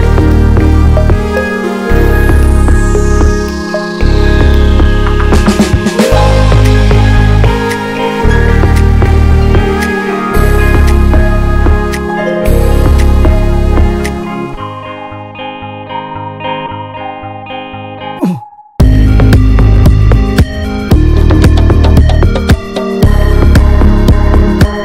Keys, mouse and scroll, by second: 0.3 scroll down 1, 0.5-2.6 middle drag, 3.7 scroll up 1, 6.5-8.2 ctrl+drag, 9.9-11.5 ctrl+drag, 11.8-13.0 middle drag, 13.7 scroll up 2, 14.1-15.2 shift+middle drag, 15.2 scroll down 1, 16.7-17.9 drag, 17.9 ctrl+z, 18.4 click, 19.1 ctrl+z, 19.6-21.0 ctrl+drag, 21.8-23.0 ctrl+drag, 23.0 scroll down 2, 23.3-24.8 middle drag.